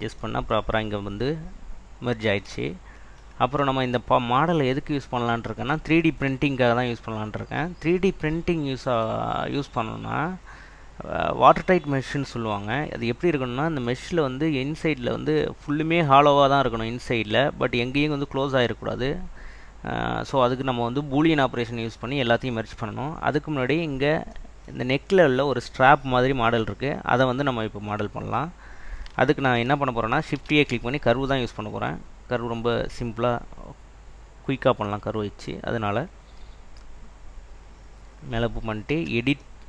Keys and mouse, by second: 28.3 click, 30.0 right click, 30.5 shift+a, 39.1 Tab.